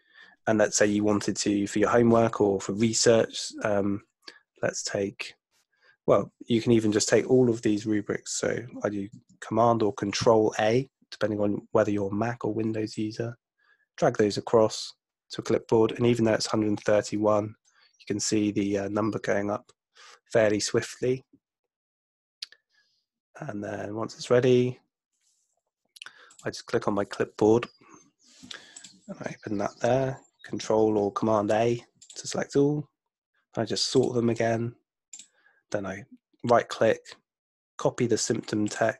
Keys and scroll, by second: 9.1 super+a, 30.5 super+a.